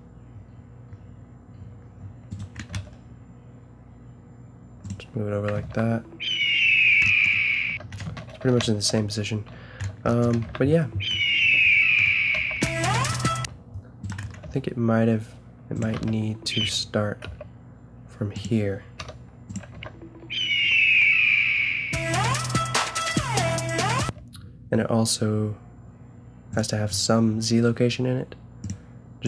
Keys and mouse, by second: 2.7 g, 5.6 alt+a, 7.7 Escape, 8.4 ctrl+z, 8.6 ctrl+z, 9.0 ctrl+z, 10.4 alt+a, 12.3 a, 13.4 Escape, 14.4 g, 15.9 alt+a, 16.6 Escape, 17.2 g, 19.0 i, 19.7 alt+a, 24.0 Escape, 26.5 click, 28.3 middle drag.